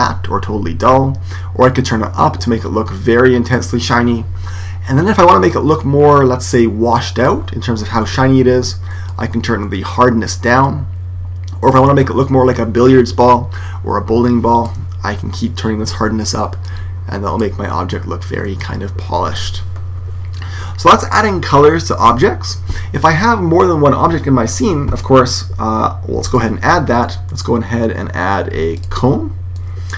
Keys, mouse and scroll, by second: 1.6 click, 7.2-10.8 drag, 15.3-18.4 drag, 18.5 click, 26.2 shift+a, 29.5 click.